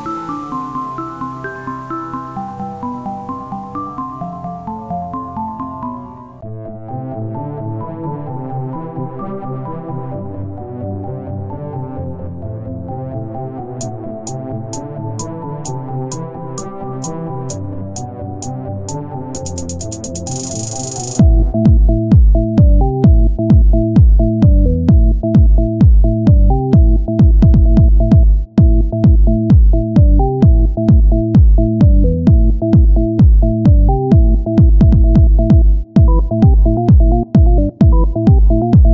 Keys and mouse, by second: 0.0 click, 0.6 KP_1, 1.1 Tab, 1.8-2.9 drag, 2.9 c, 4.7-6.5 drag, 6.5 Tab, 6.8 z, 9.8 KP_1, 11.3 z, 14.4 z, 16.1 Tab, 19.2 ctrl+r, 21.3 ctrl+Tab, 23.4 middle click, 23.6 click, 23.6-25.9 middle drag, 25.9 KP_1, 26.5 z, 27.9 e, 30.9 o, 31.5-32.7 drag, 32.4 z, 33.2 click, 34.2 e, 36.4 click, 37.0 e, 38.4-38.9 drag.